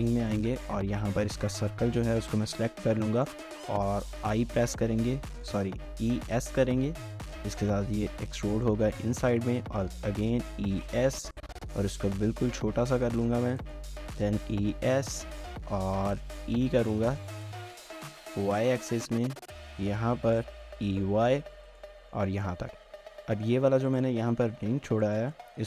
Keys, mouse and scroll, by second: 0.5 alt+click, 1.1 typing, 2.0 scroll up 1, 2.2 shift+middle click, 2.5 scroll up 1, 2.9 middle click, 4.4 typing, 5.3 right click, 5.8-7.3 typing, 7.4 shift+middle click, 8.0 shift+middle click, 8.7 middle click, 9.5-10.2 typing, 13.3-14.7 typing, 15.8 middle click, 16.4 typing, 18.3 typing, 20.6-21.0 typing, 22.0 shift+middle click, 22.8 3, 23.9 alt+click, 25.0 shift+middle click.